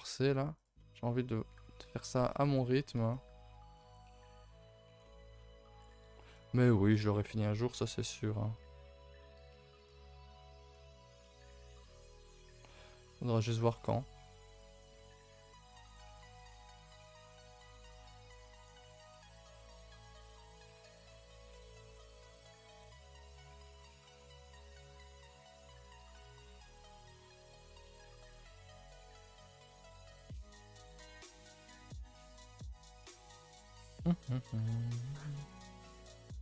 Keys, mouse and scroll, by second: 0.2 g, 0.8 middle click, 1.4 g, 2.5-2.8 scroll up 2, 2.8 1, 3.1 click, 3.5 g, 4.3 middle click, 4.5 3, 4.7 click, 5.0 middle click, 5.3-5.8 scroll down 2, 5.8 shift+middle click, 6.3 shift+click, 6.6 middle click, 6.9 scroll down 1, 7.2 shift+middle click, 8.0 e, 9.2 middle click, 9.7 click, 9.9 middle click, 10.8-11.2 scroll up 1, 11.2 shift+click, 11.7 e, 13.0 click, 13.3 s, 14.1 click, 14.4 s, 14.9 click, 15.1 s, 15.8 click, 16.0 s, 17.1 middle click, 18.0 click, 18.3 click, 18.5 g, 19.1 middle click, 19.4 r, 20.2 g, 20.9 middle click, 21.4 s, 21.8 g, 22.6 click, 23.0 middle click, 23.4 click, 23.9 click, 24.2 middle click, 24.5 g, 25.5 r, 26.0-27.8 middle drag, 27.8 click, 28.3 middle click, 29.0 click, 29.2 middle click, 29.7 g, 30.9 r, 32.2 g, 32.9 middle click, 33.6 click, 33.9 middle click, 34.5 g, 35.3 r, 36.2 s.